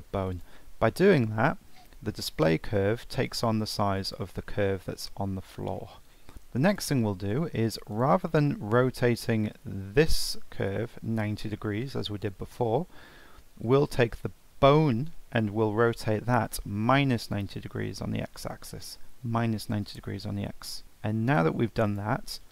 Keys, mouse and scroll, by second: 0.3 click, 2.1-4.0 middle drag, 4.0 click, 4.7-5.1 middle drag, 5.1-5.5 scroll down 2, 5.5-5.8 scroll up 1, 5.8-6.2 middle drag, 6.2 scroll up 1, 6.3 middle click, 6.7 click, 7.9 click, 8.3-9.5 middle drag, 9.5 r, 13.6 click, 16.4-19.6 drag, 20.8-21.9 middle drag, 21.9 click.